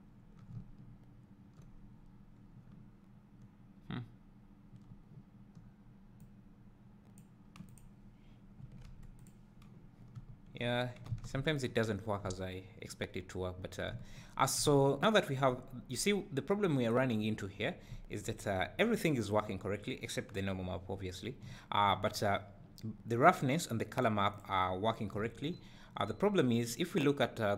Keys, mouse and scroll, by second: 0.5 `, 1.8-2.6 scroll up 2, 2.6 scroll up 1, 2.7 `, 10.0 scroll down 1, 10.1 `, 10.7 scroll up 1, 11.1 alt+a, 11.4 `, 11.9-12.3 scroll down 2, 13.2-13.6 scroll up 2, 13.6 scroll down 2, 13.9 `, 14.3 scroll down 1, 14.6 `, 15.1 scroll up 1, 15.6 `, 16.2 scroll up 1, 21.5 `, 22.4 scroll down 2, 23.3-24.8 drag, 25.3 `, 25.9-26.4 scroll up 1.